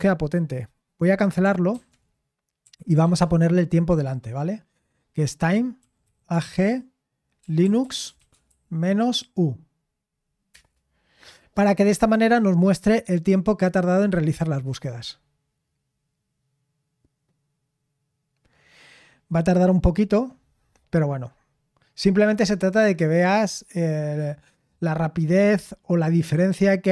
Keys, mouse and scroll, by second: 1.7 ctrl+c, 2.3-3.5 typing, 5.5-9.1 typing, 10.5 Return.